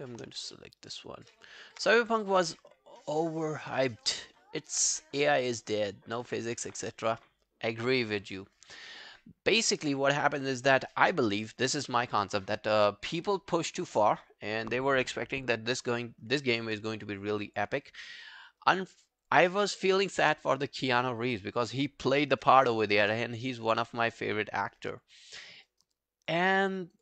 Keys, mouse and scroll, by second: 0.0 shift+click, 0.4 scroll down 1, 0.6 alt+middle click, 0.8 alt+right click, 1.1 alt+scroll down 1, 1.4 alt+click, 17.0-17.3 alt+scroll down 1, 17.4 alt+click, 17.8 alt+middle click, 18.0 alt+right click, 18.3 alt+click, 18.6 alt+right click, 19.0 alt+click, 25.4 alt+middle click, 25.7 alt+right click, 26.0 alt+click, 26.5 alt+middle click, 26.8 alt+right click.